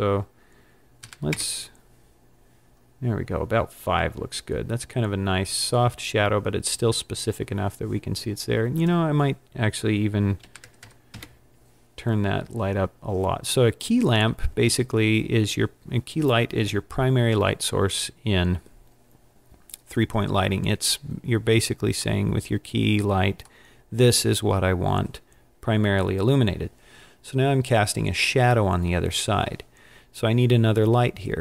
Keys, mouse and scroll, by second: 11.0 click, 11.0 KP_0, 22.2 middle click.